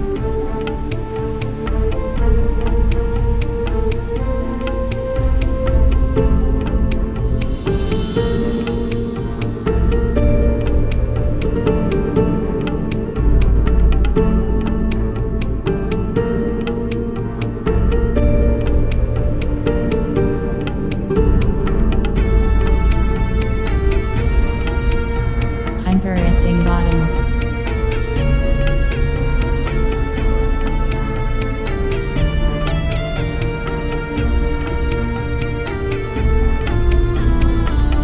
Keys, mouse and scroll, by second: 0.3 click, 0.9-4.6 middle drag, 4.8-10.0 right drag, 9.3-12.1 middle drag, 10.6-13.8 right drag, 13.8 middle click, 18.5 click, 19.5 right click, 20.3 KP_1, 21.9 z, 22.9 g, 24.3 click, 25.0 e, 25.6 g, 26.5-28.3 middle drag, 27.0 z, 27.4 Tab, 30.7-32.7 middle drag, 33.0 Tab, 34.5 click, 35.6-37.6 right drag, 37.6 middle click, 37.9 KP_1.